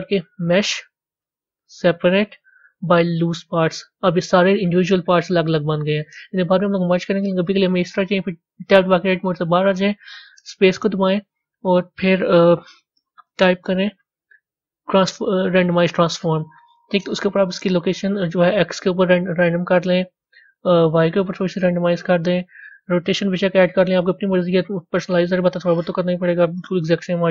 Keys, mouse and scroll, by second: 5.1-5.8 scroll down 6, 5.8-8.6 scroll up 1, 8.6-10.2 scroll up 1, 10.2-11.6 scroll up 1, 11.6-13.3 scroll up 1, 13.3-15.8 scroll up 1, 15.8-17.0 scroll up 1, 17.0-18.5 scroll up 1, 18.5-27.3 drag.